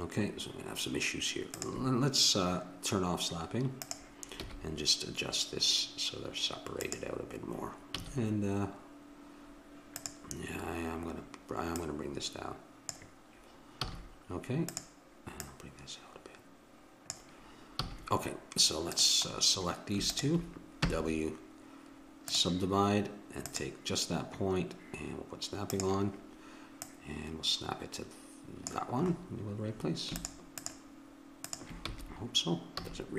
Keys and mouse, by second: 1.5-3.4 drag, 3.8-5.1 drag, 4.4 g, 8.0 a, 10.0-13.9 drag, 13.9 a, 14.7-17.4 drag, 17.8 a, 18.9-22.4 drag, 20.8 w, 23.4-28.4 drag, 30.2-31.9 drag, 31.9 f, 32.8 a.